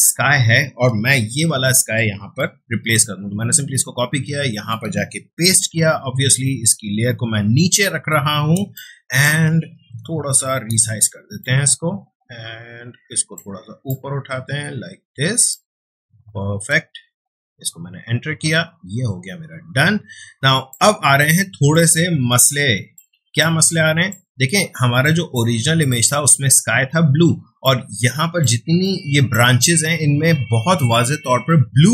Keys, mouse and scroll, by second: 1.1 ctrl+a, 2.5 ctrl+c, 3.8 ctrl+Tab, 5.2 ctrl+v, 6.4-8.6 drag, 8.6 space, 8.7 ctrl+click, 9.8 ctrl+t, 11.4-18.1 shift+drag, 18.4-20.3 ctrl+drag, 20.3 space, 20.7 click, 20.9 space, 21.7-25.0 ctrl+drag, 27.2 space, 27.6-31.8 ctrl+drag.